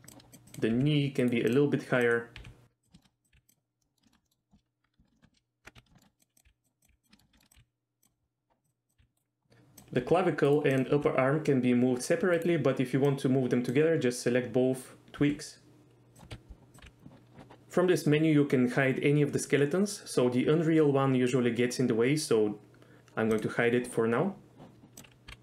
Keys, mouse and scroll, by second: 0.1 click, 0.3 click, 0.7 g, 1.2 right click, 1.5 click, 2.4 g, 3.0 shift+middle click, 3.3 g, 3.5 click, 3.8 middle drag, 4.1 shift+middle click, 4.2 middle click, 5.1 shift+middle click, 5.6-7.6 typing, 6.0 shift+middle click, 6.2 click, 6.4 click, 7.1 shift+middle click, 9.0 g, 9.5 g, 9.8 click, 10.0 g, 10.5 right click, 10.9 g, 12.4 right click, 13.1 click, 15.2 g, 16.3 KP_7, 16.8 g, 17.0 z, 23.4 click, 24.9 click, 25.3-25.4 typing.